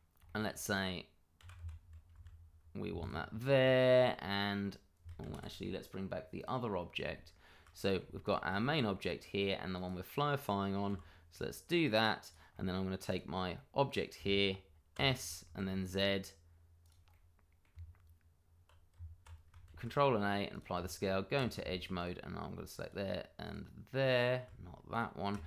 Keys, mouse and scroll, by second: 0.2 shift+middle click, 0.3 middle click, 1.4 g, 1.5 y, 2.1 x, 3.0 click, 3.2-3.6 scroll down 1, 3.6 shift+middle click, 4.2 middle click, 5.2 ctrl+z, 6.3 click, 6.7-7.1 scroll up 1, 7.7 middle click, 8.2 shift+click, 8.3 click, 8.7 middle click, 9.7 click, 10.9 g, 12.2 click, 12.6 middle click, 13.0 click, 13.5 middle click, 14.9 s, 15.4 z, 16.8 click, 17.1 middle click, 17.7 Tab, 19.6 ctrl+a, 20.5 click, 20.7 Tab, 21.9 alt+click, 22.8 click, 24.9 shift+click.